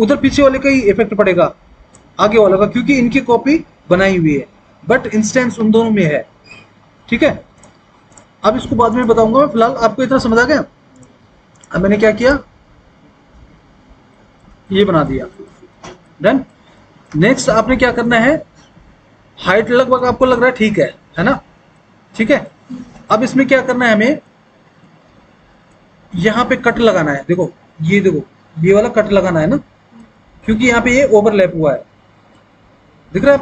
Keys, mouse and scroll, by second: 1.3 click, 10.4 Delete, 13.7 Delete.